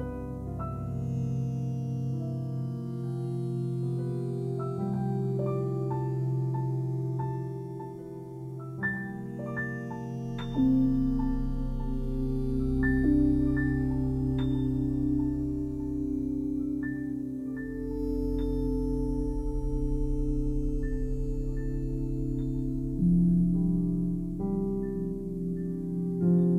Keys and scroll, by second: 0.3 alt+r, 1.2 alt+r, 1.7 Delete, 4.4 alt+r, 4.9 Delete, 6.8 alt+r, 7.2 Delete, 8.9 alt+r, 9.2 Delete, 11.2 alt+r, 11.4 Delete, 12.0 ctrl+z, 12.9 alt+r, 13.4 Delete, 15.6 alt+r, 16.0 Delete, 16.4 ctrl+z, 16.9 alt+r, 18.2 alt+r, 18.6 Delete, 19.4 Escape, 20.4 alt+r, 20.8 Delete, 22.0 alt+r, 22.2 Delete, 23.4 alt+r, 23.9 Delete, 25.8 alt+r, 26.0 Delete.